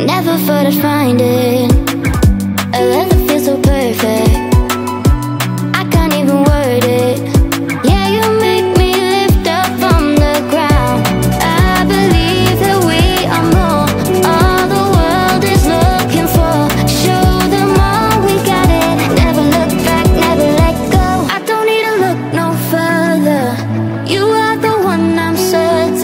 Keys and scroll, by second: 17.7 Up, 25.6 Up.